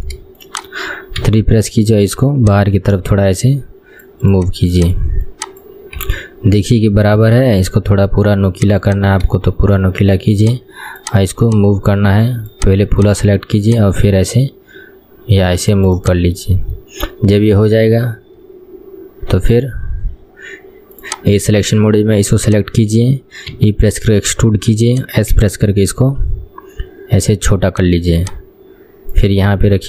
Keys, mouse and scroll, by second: 0.6 shift+click, 1.4 KP_3, 2.6 click, 4.5 click, 5.4 click, 6.2 KP_1, 6.4-7.3 scroll down 1, 7.3 s, 8.9 click, 9.2-9.9 scroll down 2, 9.9 shift+middle click, 10.5 click, 11.1 click, 11.5 click, 13.7 click, 15.8 click, 16.1 click, 16.4-16.9 scroll up 4, 16.9-18.2 shift+middle drag, 18.2-21.3 scroll down 3, 21.3 click, 21.5-22.5 scroll up 4, 22.5 click, 23.1-23.7 scroll down 1, 23.7 e, 25.5 s, 28.3 click.